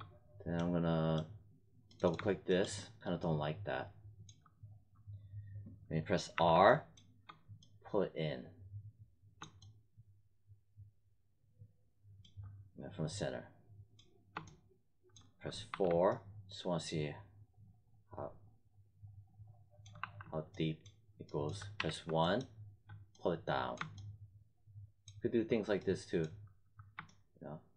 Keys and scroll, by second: 6.3 r, 15.6 4, 19.9 5, 21.7 w.